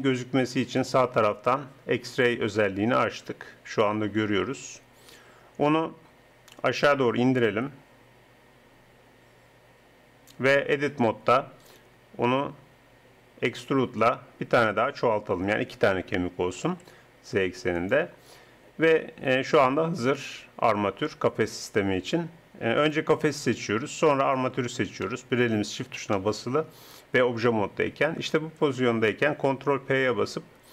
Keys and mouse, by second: 0.8-8.5 drag, 8.5 middle click, 10.9 Tab, 11.6-13.5 drag, 13.7 e, 18.3 Tab, 18.6 click, 20.4 click, 22.8-25.8 drag, 25.8-27.3 middle drag, 27.3-29.7 drag, 29.7 ctrl+p.